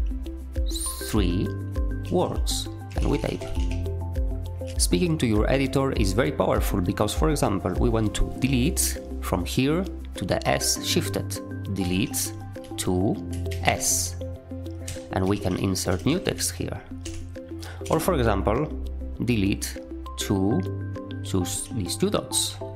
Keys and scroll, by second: 1.0-3.9 typing, 4.7 ctrl+alt+a, 11.7-13.4 typing, 14.5-17.8 typing, 17.0 Escape, 21.4-22.7 typing.